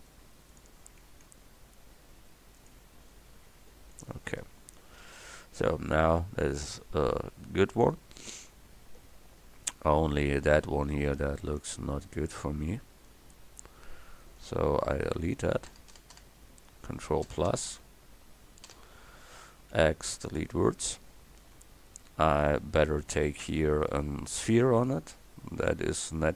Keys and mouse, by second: 1.1 ctrl+r, 4.6 Tab, 8.0 Tab, 11.6 Tab, 15.7 ctrl+KP_Add, 19.6 x, 24.5 KP_1.